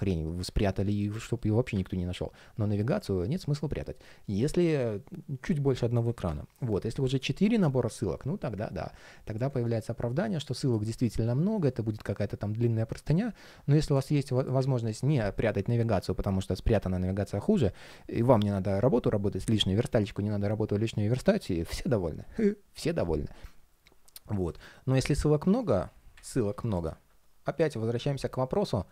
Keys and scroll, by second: 12.7 super+z.